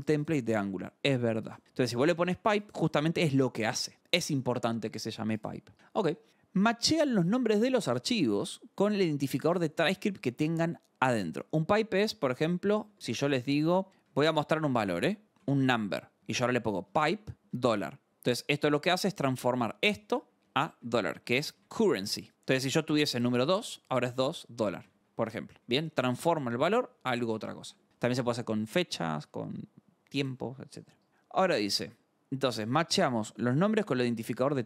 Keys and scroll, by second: 6.3-8.1 scroll, 12.8 alt+Tab, 13.1-26.8 typing, 13.3 Return, 18.2 Escape, 27.6 alt+Tab, 31.1 scroll.